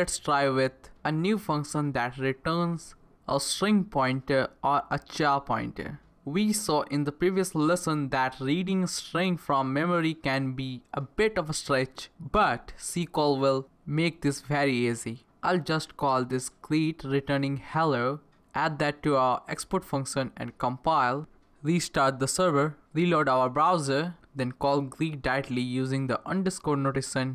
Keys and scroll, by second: 9.0 Return, 12.8 Return, 13.0-21.5 typing, 19.2 Left, 22.0 ctrl+c, 22.0 Return, 22.4 Up, 22.5 Return, 24.4-26.9 typing.